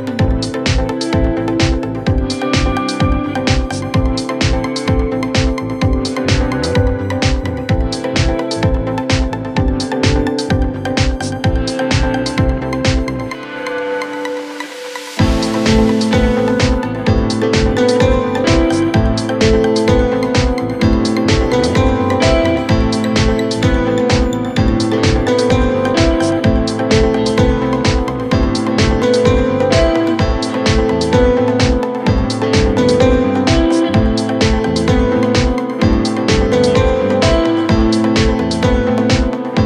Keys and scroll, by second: 6.9-9.1 typing, 14.9-15.3 typing.